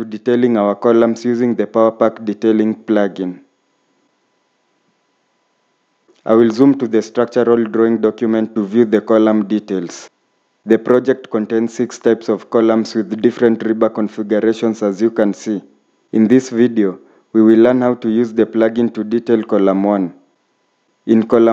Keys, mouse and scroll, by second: 1.0 scroll up 1, 4.8 scroll up 1, 7.5-7.8 scroll up 1, 11.2 middle click, 19.9-21.0 scroll up 1.